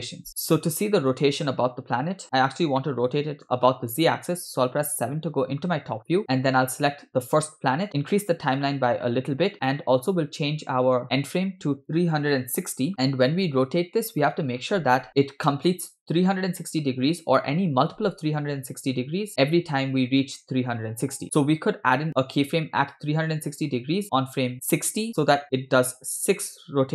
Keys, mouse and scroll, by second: 2.8-3.5 middle drag, 5.2 KP_7, 6.0 scroll up 3, 6.2 click, 6.2 shift+middle click, 7.1 scroll down 2, 7.5-7.9 shift+middle drag, 9.3 click, 11.0 scroll down 3, 11.9 click.